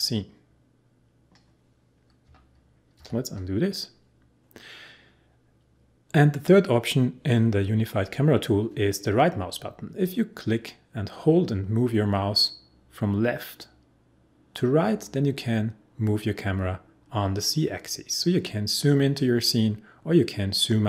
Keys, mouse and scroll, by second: 2.9 ctrl+z, 10.0-20.0 right drag.